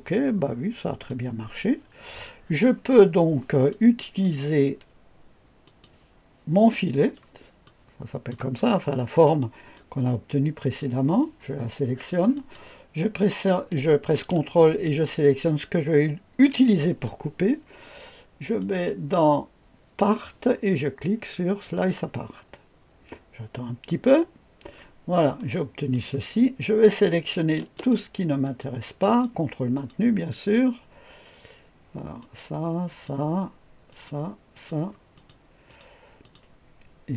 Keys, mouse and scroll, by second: 0.4-1.0 scroll down 1, 1.0-2.2 drag, 3.6-4.3 drag, 5.6 click, 7.6-8.3 drag, 8.6-9.4 scroll up 1, 9.7-10.8 scroll down 1, 12.3 click, 16.4 ctrl+click, 18.5 click, 19.9 click, 21.7 click, 24.7-25.3 scroll up 1, 25.3-25.9 right drag, 26.8 click, 27.7 ctrl+click, 28.4 ctrl+click, 29.0 ctrl+click, 29.7 ctrl+click, 30.3 click, 32.1 click, 32.8 click, 33.8 click, 34.5 click, 35.1 click, 35.6 click, 36.2 click.